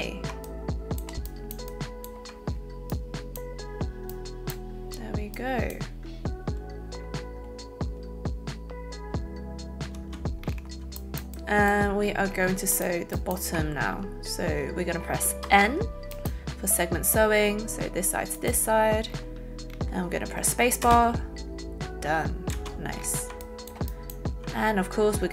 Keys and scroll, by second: 10.0 space, 20.9 space, 23.2 alt+space.